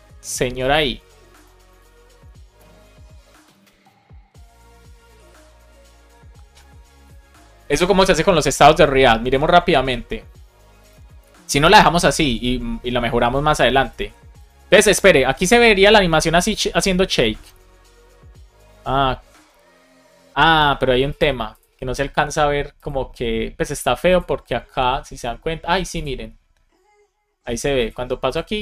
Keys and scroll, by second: 14.7 super+r.